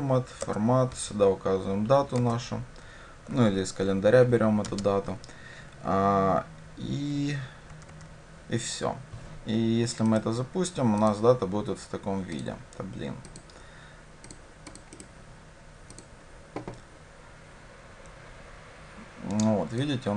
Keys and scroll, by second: 16.1 ctrl+shift+F10.